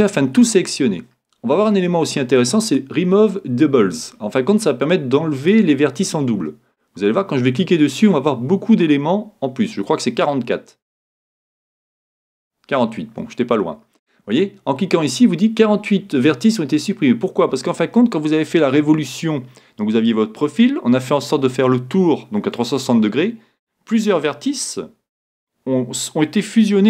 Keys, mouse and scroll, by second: 11.7-13.5 drag.